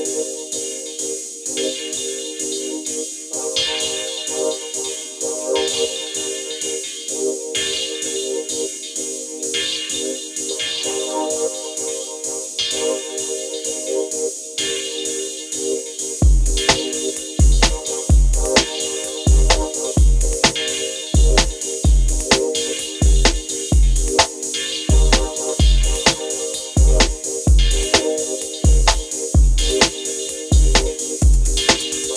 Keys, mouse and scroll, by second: 0.4 ctrl+t, 1.3-3.2 drag, 11.1-12.7 drag, 12.7-17.5 drag, 18.8 ctrl+t, 19.8-32.1 drag.